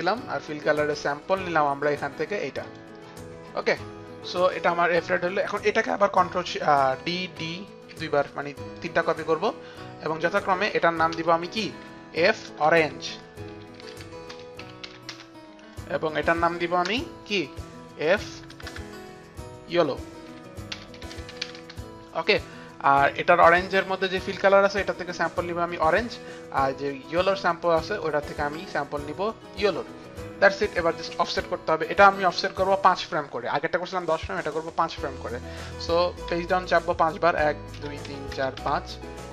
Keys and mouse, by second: 0.0 click, 1.4 click, 2.8 click, 7.0 ctrl+d, 8.8 click, 10.4 ctrl+d, 10.4 click, 11.8 Return, 11.8 click, 12.1 Right, 12.7 Right, 12.7 Return, 12.7 click, 12.7-15.5 typing, 13.0 Right, 13.0 Return, 13.0 click, 13.6 click, 16.3 click, 16.9 Return, 19.4 Right, 19.4 Return, 19.4 click, 19.4-22.1 typing, 20.3 Right, 20.3 Return, 20.3 click, 23.1 click, 24.0-25.5 typing, 24.3 click, 25.0 click, 25.7 click, 26.9 click, 29.6 click, 32.5 click, 36.4 Page_Down, 36.4 click, 37.8 Page_Down, 38.1 Page_Down, 38.7 Page_Down.